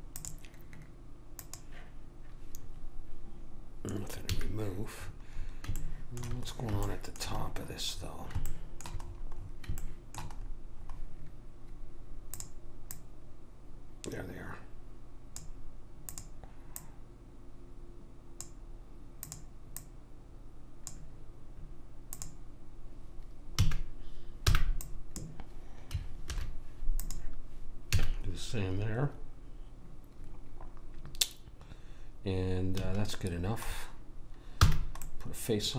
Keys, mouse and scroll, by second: 0.1-3.3 drag, 4.3 a, 5.0-6.8 middle drag, 10.4-12.0 middle drag, 12.3 click, 16.1 click, 19.2 click, 22.1 click, 23.6 a, 24.5 b, 26.3 alt+m, 28.0 a, 28.4-29.5 middle drag, 32.7 a, 34.6 f.